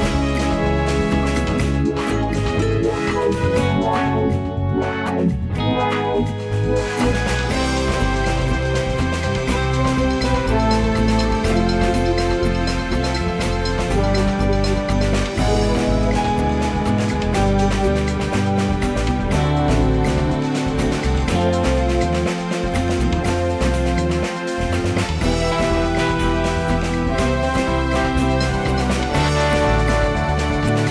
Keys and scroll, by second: 0.2 space, 0.8 space, 14.7 space, 16.6 space, 22.5 space.